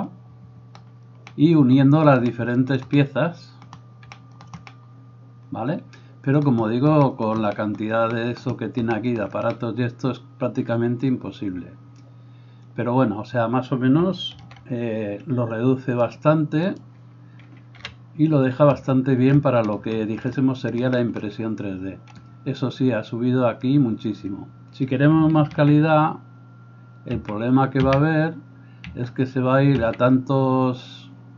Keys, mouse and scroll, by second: 14.7 alt+h, 16.2-31.3 drag, 17.8 KP_1, 26.4 ctrl+z, 27.6 ctrl+z, 28.3 ctrl+z, 29.3 ctrl+z, 30.3 ctrl+z.